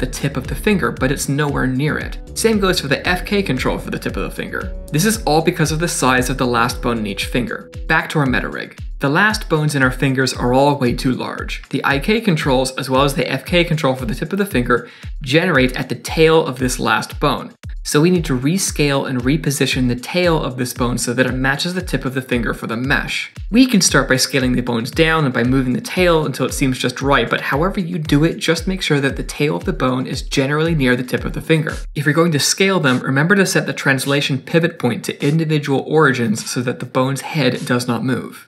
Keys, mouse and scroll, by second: 3.8 click, 4.9 click, 8.8 click, 9.4 click, 24.1 shift+middle click, 24.1 scroll up 3, 24.2 click, 24.4 middle click, 24.4-30.0 typing, 24.9 middle click, 25.3 scroll up 2, 25.5 scroll down 2, 25.7 middle click, 26.2 middle click, 26.8 middle click, 27.0-27.5 scroll down 5, 27.2 click, 27.5 middle click, 27.9 middle click, 28.3 middle click, 29.0 scroll down 1, 29.0 middle click, 29.4 middle click, 29.8 middle click, 30.1 middle click, 30.4 middle click, 30.6 scroll down 6, 30.9 middle click, 31.2 click, 31.3 shift+middle click, 31.5 scroll up 3, 31.7 shift+middle click, 32.4 s.